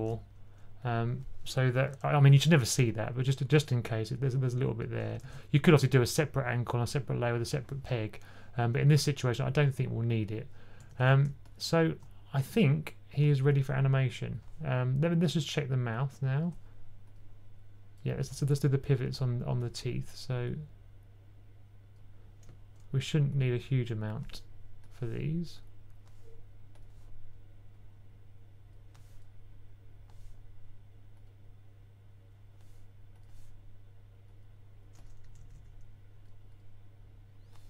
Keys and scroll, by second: 5.1 super+z, 10.7 typing, 18.1 typing, 20.7 typing, 35.1-35.4 typing.